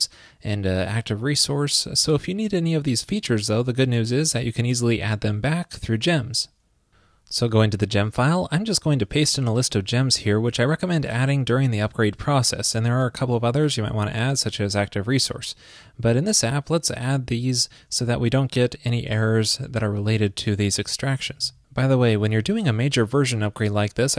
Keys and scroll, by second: 9.7 super+v.